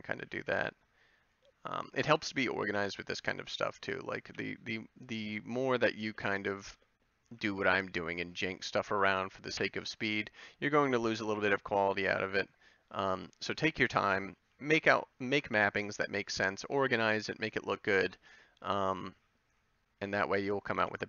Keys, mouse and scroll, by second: 0.4 b, 2.2 ctrl+l, 3.2 s, 4.3 g, 6.1 a, 7.3 b, 9.1 ctrl+l, 10.0 g, 10.8 s, 12.0 g, 14.4 a, 15.4 b, 16.6 g, 18.1 g, 18.9 a, 20.8 c.